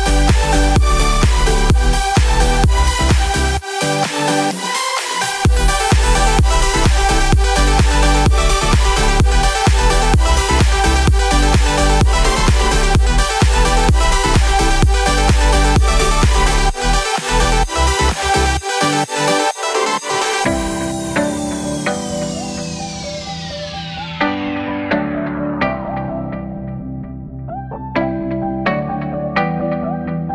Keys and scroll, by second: 11.6 ctrl+s.